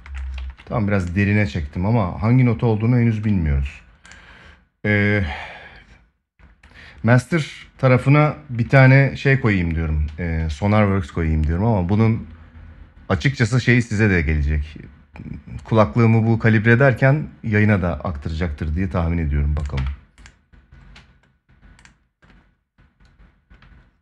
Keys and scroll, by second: 0.1 ctrl+s.